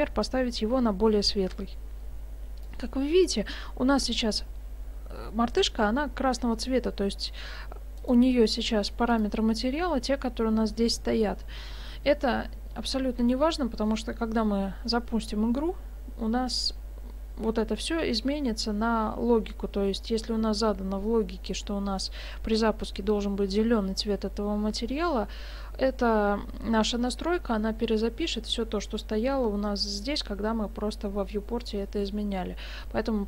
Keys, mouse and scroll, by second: 8.0 right click, 9.1 click.